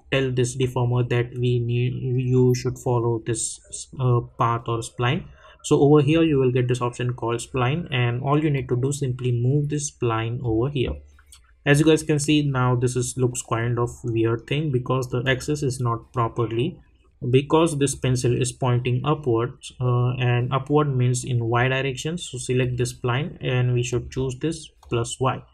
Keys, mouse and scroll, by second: 6.1 click, 8.5-12.9 drag, 15.2 click, 17.9 click, 22.6 click.